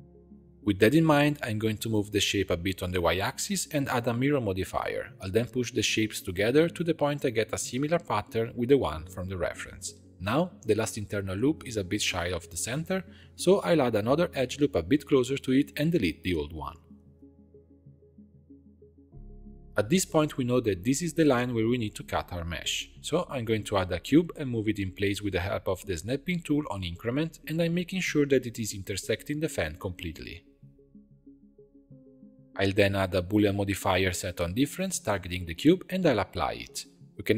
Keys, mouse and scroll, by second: 0.0 shift+middle click, 0.9 Tab, 1.1 a, 1.8 g, 3.1 Tab, 3.4-5.4 drag, 5.7 drag, 6.1 g, 14.6 ctrl+r, 17.8 2, 18.1 alt+click, 18.6 x, 19.7 Tab, 21.3 click, 23.1 scroll down 3, 23.2 shift+a, 25.7 click, 26.0 Tab, 26.4 scroll up 2, 26.9 g, 28.5 Tab, 28.9 scroll down 1, 29.1-30.1 middle drag, 30.1 click, 30.7 g, 31.2 click, 31.9-33.7 drag, 36.0 ctrl+a, 36.7 click.